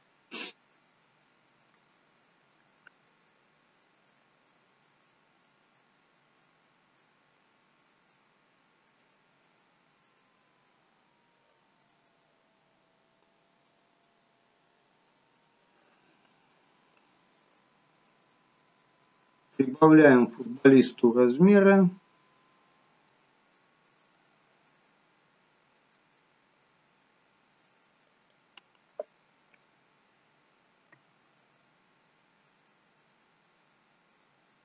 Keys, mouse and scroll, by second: 17.5 scroll down 3, 17.9 middle click, 19.2 s.